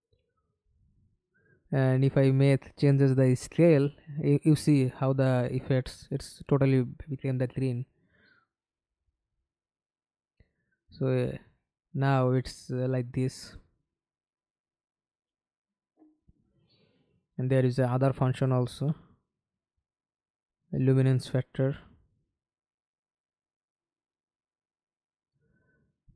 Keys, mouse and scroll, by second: 0.3-1.1 scroll down 1, 13.9-15.4 scroll down 6.